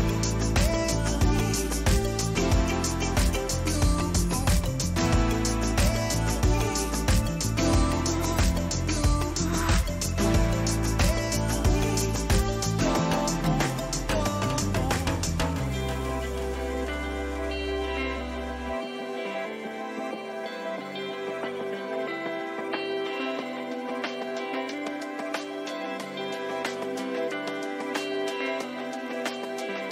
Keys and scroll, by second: 1.9 Right, 16.9 ctrl++, 23.7 Return, 24.2 ctrl++, 26.0 ctrl+t, 29.4 Return.